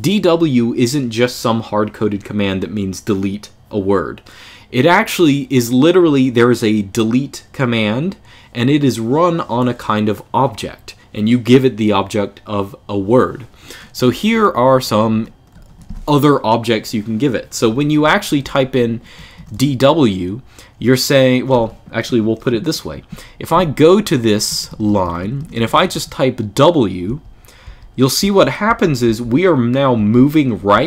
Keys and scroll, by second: 13.8-15.7 typing, 17.3-19.3 typing, 23.3-28.8 typing, 29.9-30.8 typing.